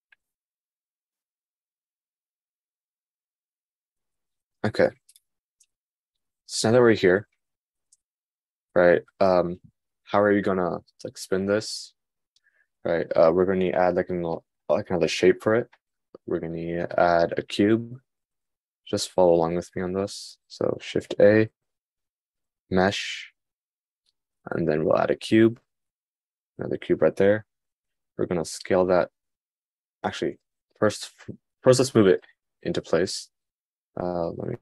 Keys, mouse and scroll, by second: 6.1-8.0 middle drag, 21.7 shift+a.